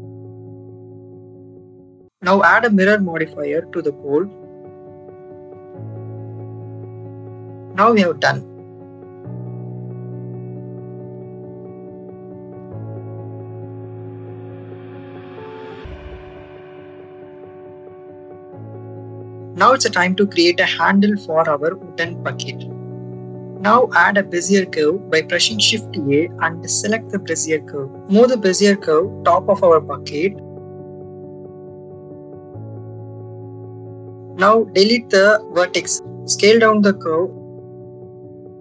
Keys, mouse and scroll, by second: 1.3 shift+middle click, 2.3-5.5 drag, 8.5 click, 9.6 click, 10.2 click, 10.7 click, 12.6 shift+middle click, 13.9 shift+middle click, 14.7 middle click, 16.2 Tab, 17.3 shift+middle click, 18.6 shift+middle click, 19.1 middle click, 21.3 click, 22.4 shift+middle click, 23.7 shift+a, 27.1 Tab, 28.0 a, 29.0 click, 30.2-31.4 drag, 31.8 shift+middle click, 32.5 middle click, 32.8-33.8 middle drag, 34.1 click, 35.2 Delete, 36.5 click.